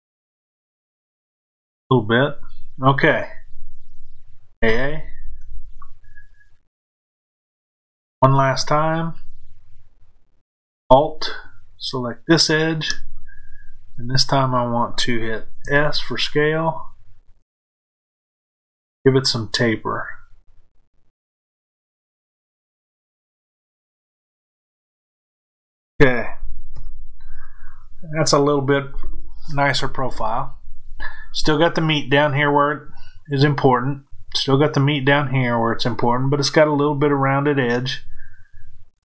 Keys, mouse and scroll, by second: 5.4-11.7 middle drag, 11.7 alt+click, 15.5 s, 24.7 click.